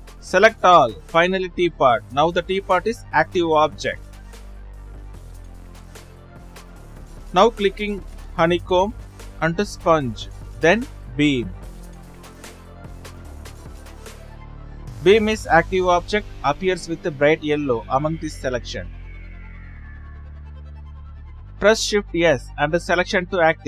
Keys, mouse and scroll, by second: 2.2 shift+click, 2.9 shift+click, 3.7 shift+click, 4.9 shift+click, 7.8-8.2 right drag, 8.2 shift+click, 11.0 drag, 11.8 click, 13.1 shift+click, 15.3 shift+click.